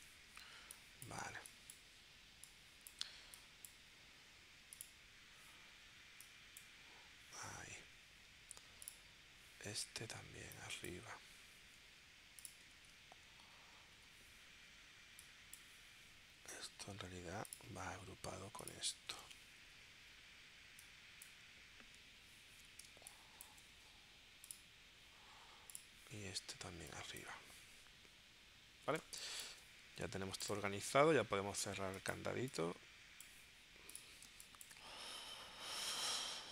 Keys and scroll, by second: 0.4 space, 22.4 super+g, 22.9 space, 29.1 space, 34.3 space.